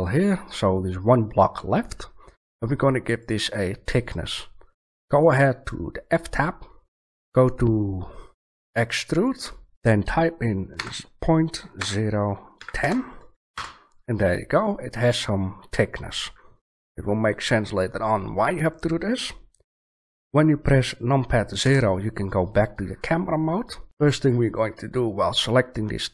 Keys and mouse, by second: 3.2 click, 3.5-5.1 middle drag, 9.3 middle click, 21.6 KP_0.